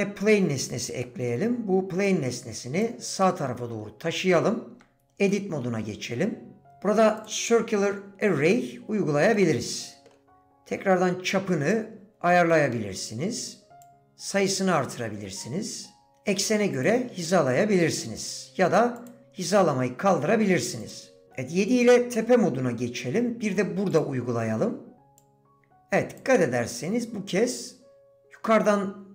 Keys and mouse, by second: 1.0 middle drag, 2.1 click, 3.2-3.8 shift+drag, 4.7 Tab, 5.3 click, 6.6 d, 9.3 middle click, 10.4-11.7 drag, 12.5 middle click, 13.9 click, 14.8-16.1 middle drag, 16.8 middle click, 18.2 middle click, 20.8 click, 25.2-26.2 drag.